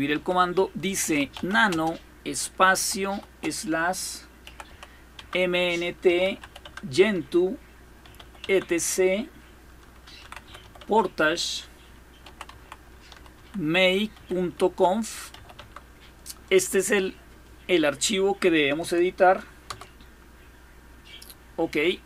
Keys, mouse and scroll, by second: 0.0-1.7 typing, 2.9 typing, 4.0-8.5 typing, 9.7-13.9 typing, 15.1 typing, 19.4 Return.